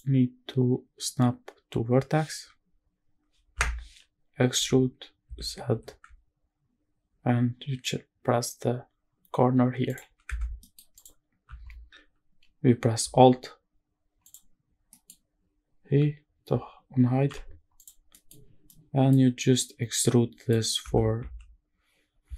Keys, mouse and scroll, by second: 4.3 e, 5.0 z, 5.4 z, 9.6 ctrl+click, 10.0 Tab, 10.3 middle click, 10.7 click, 12.7 alt+h, 14.0 click, 14.4 scroll down 2, 14.6 middle click, 15.0-16.1 scroll up 2, 17.0 h, 17.5 click, 17.8 middle click, 18.1 scroll up 1, 18.4-18.8 middle drag, 18.9-19.3 scroll up 1, 19.3 middle click, 20.5 Tab, 20.9 a, 22.0 e.